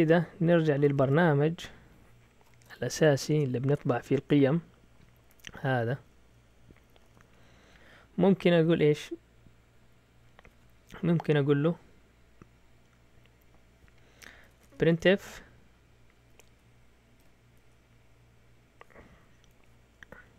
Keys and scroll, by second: 0.5-3.4 typing, 4.0-5.1 Down, 4.6-5.4 typing, 6.6 Down, 6.8 Down, 6.9 Down, 7.0 Down, 7.2 Down, 8.4 Right, 8.6 Right, 8.8 Right, 8.9 Right, 14.2-15.4 typing, 17.1-17.5 typing, 20.1 Left.